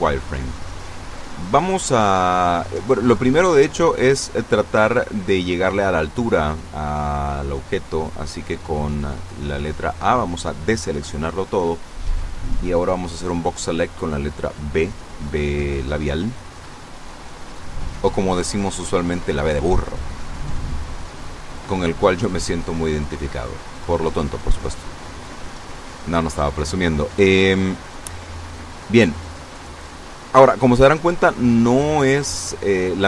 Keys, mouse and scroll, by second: 5.7 Tab, 9.1 a, 12.4 b, 12.7 click, 14.1-18.7 drag, 19.5 a, 20.3 b, 20.7 click, 21.6 click.